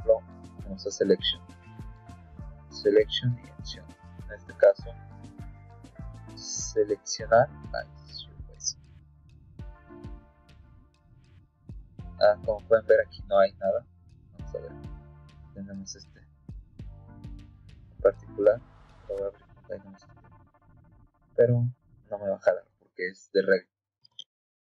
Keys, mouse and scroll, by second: 0.1 click, 1.6 click, 2.9 click, 7.3 click, 13.8 click.